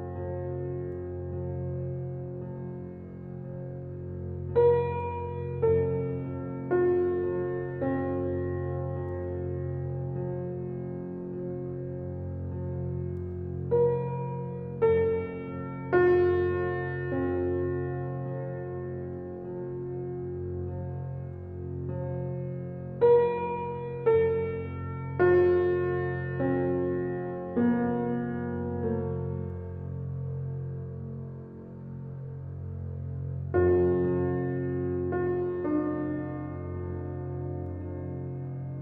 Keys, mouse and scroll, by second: 2.8 alt+click, 10.4 alt+click, 11.6 shift+click, 16.4-19.6 right drag, 19.6 alt+click, 20.0 right click, 21.0 click, 21.7 alt+right click, 21.9 alt+click, 22.4 alt+middle click, 23.8 right click, 24.8 scroll down 1, 25.2 alt+click, 26.4-28.4 shift+drag, 28.8-33.1 right drag, 33.1 click, 33.8 alt+right click, 34.1 alt+click.